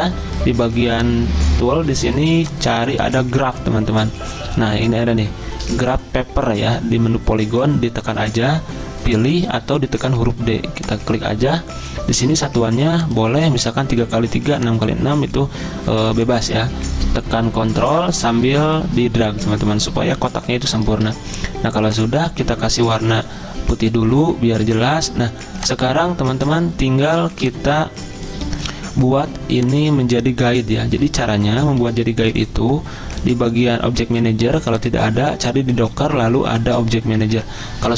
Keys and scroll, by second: 31.8 p.